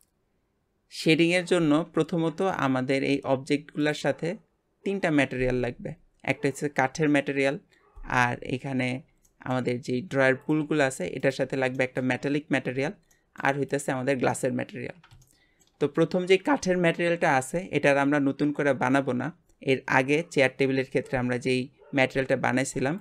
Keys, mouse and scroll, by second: 2.6 click, 3.1 g, 8.3-8.6 scroll up 3, 9.0 scroll down 1, 9.3 shift+middle click, 9.9 scroll up 1, 10.4 click, 10.6 g, 11.8-13.7 shift+middle drag, 13.7 click, 14.8 scroll down 1, 15.2-18.4 shift+middle drag.